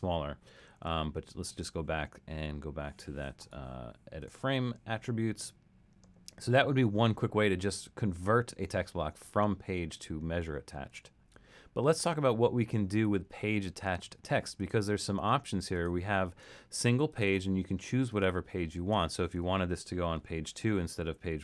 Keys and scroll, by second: 2.3 super+z, 20.2 2.